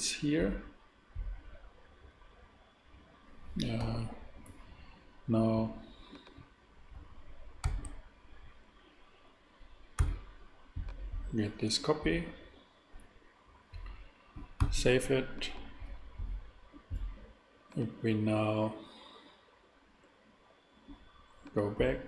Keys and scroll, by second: 3.8 g, 7.6 shift+d, 10.0 x, 14.6 super+s.